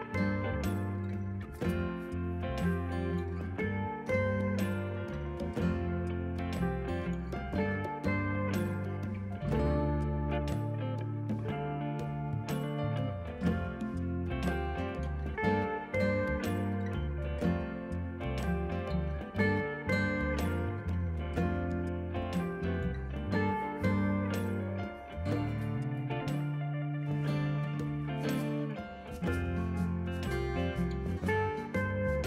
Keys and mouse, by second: 0.6 click, 1.1 click, 2.1 click, 2.8 click, 3.7 ctrl+shift+x, 3.8 click, 5.9 click, 7.9 click, 10.0 Escape, 10.2 click, 11.2 click, 11.5 ctrl+click, 11.8 right click, 11.9 click, 12.8 right click, 13.5 click, 16.0 shift+click, 16.6 ctrl+1, 16.7 click, 18.3 KP_2, 18.4 Return, 20.3 click, 20.5 ctrl+1, 20.6 click, 21.5 KP_5, 21.6 Return, 22.4 KP_Subtract, 22.6 Return, 24.9 ctrl+1, 24.9 click, 25.8 Delete, 26.1 click, 26.6 click, 28.2 click, 29.9 Escape, 30.6 click.